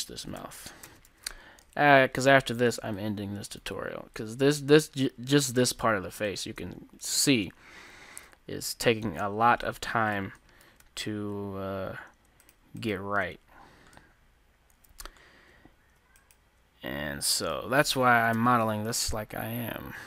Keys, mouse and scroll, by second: 0.0-0.9 typing, 1.1 Tab, 3.1-6.1 drag, 5.0-7.7 middle drag, 5.2 Tab, 6.4-9.0 right drag, 8.0 g, 9.1 g, 10.9 ctrl+z, 12.5 middle click, 12.5-14.6 right drag, 14.0-18.5 middle drag, 16.3-17.9 right drag, 18.3 o, 19.2 g.